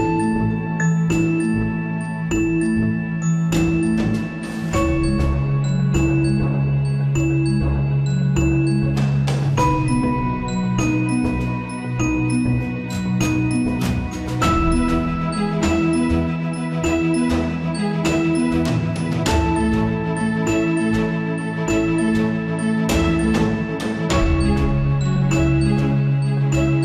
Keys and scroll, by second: 9.1 alt+/, 24.2 ctrl+z.